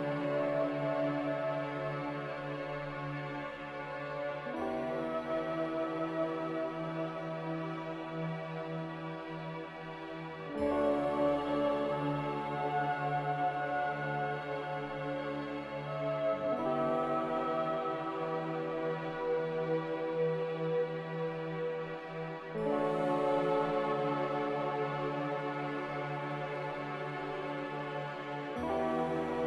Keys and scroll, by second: 0.0 z, 1.3 s, 3.0-4.3 typing, 6.6-7.3 typing, 9.1 z, 10.6-11.4 typing, 14.4 x, 15.1 a, 20.1 n, 25.1 z, 26.4 n.